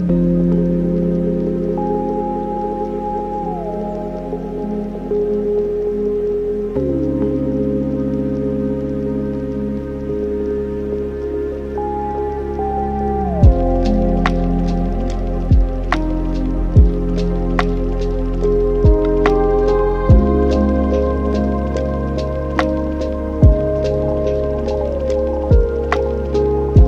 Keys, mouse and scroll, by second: 4.0-8.9 drag, 8.9 n, 9.3-10.4 scroll down 5, 10.4 click, 11.7 drag, 13.6-14.9 middle drag, 14.9 n, 15.8-16.6 scroll up 6, 16.6 click, 17.2 click, 17.4-20.4 drag, 23.2-23.9 scroll down 6, 25.9 scroll up 1.